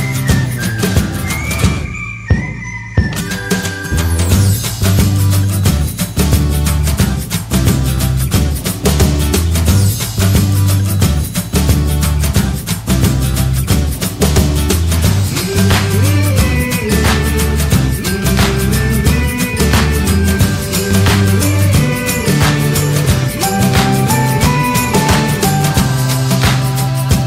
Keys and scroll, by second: 0.0-0.5 typing, 0.6 Return, 4.3 Return, 22.7 Return, 24.9 Return.